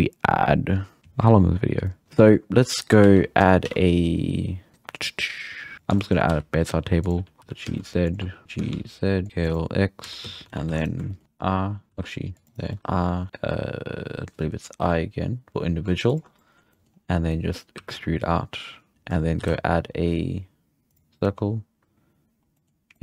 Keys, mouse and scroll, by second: 2.0 scroll down 4, 2.3-3.0 middle drag, 3.0 shift+s, 3.6 shift+a, 6.0-6.3 shift+middle drag, 6.3 s, 7.2 g, 7.4 g, 8.4 g, 9.3 s, 10.0 s, 10.4 scroll up 2, 10.7 3, 10.8 right click, 11.1 shift+middle click, 11.9 ctrl+z, 12.5 ctrl+r, 12.7 middle click, 16.4 middle click, 16.9-17.3 scroll up 2, 17.3 middle click, 17.8 e, 18.9-19.4 scroll up 3, 19.4 shift+a, 21.0 shift+a, 21.3-22.6 scroll down 1, 22.6-23.0 middle drag.